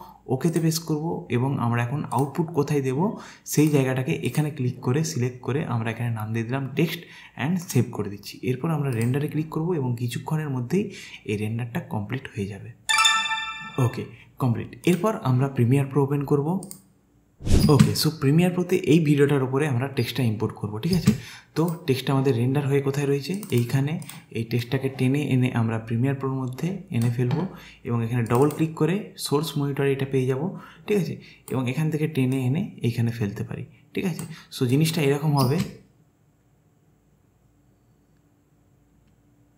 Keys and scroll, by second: 17.7 space, 21.1 space, 35.5 space.